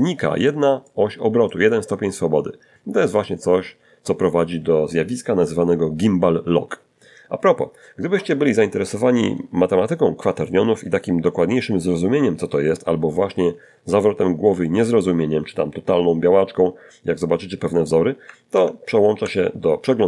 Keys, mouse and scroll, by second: 16.8 alt+Tab.